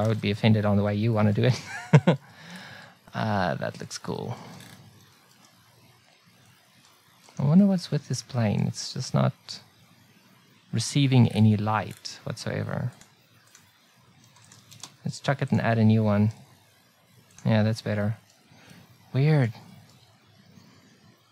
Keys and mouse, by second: 0.0 n, 0.0 t, 7.2 right click, 7.8-15.5 drag, 14.5 x, 16.3 s, 18.0-19.6 drag.